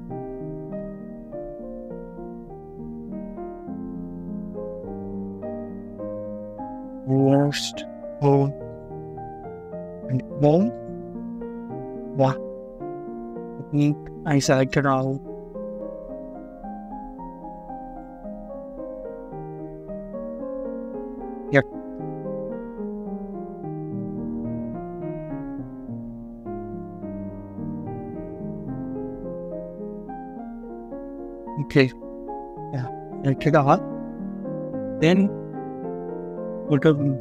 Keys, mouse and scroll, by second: 7.3-7.7 scroll down 1, 12.1 double click, 12.6-13.2 scroll up 1, 13.6 double click, 14.0-14.3 scroll up 1, 15.0 double click, 16.5-17.3 scroll up 1, 17.8 double click, 18.8-19.8 scroll up 1, 19.8-21.0 scroll down 1, 21.4-22.6 scroll up 1, 27.8 double click, 28.2-28.8 scroll down 1, 29.8-30.2 scroll down 1, 30.2 double click, 30.7-31.1 scroll down 1, 32.7 middle click, 37.1 scroll down 1.